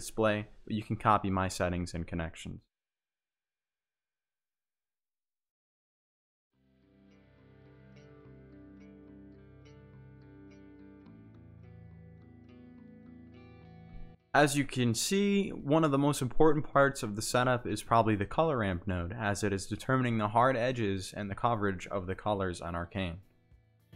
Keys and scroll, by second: 3.4 z, 12.6 ctrl+z.